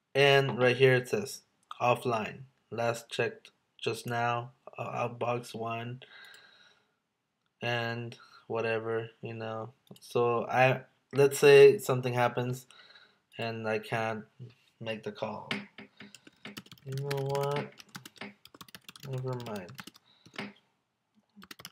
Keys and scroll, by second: 16.7 space, 17.1 space, 17.9 space, 19.0 space, 19.8 space, 21.5 space.